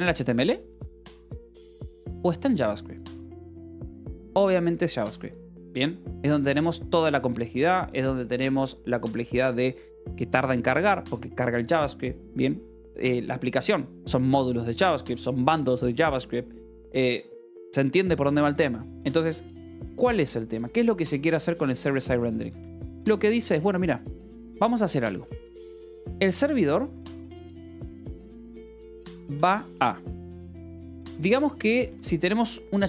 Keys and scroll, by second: 0.0-2.0 typing, 0.5 Escape, 6.0 Escape, 19.7 j, 21.0 k, 21.9 k, 22.3 Escape, 22.5 j, 23.3 a, 25.9-29.6 typing, 30.6 -, 31.7 space.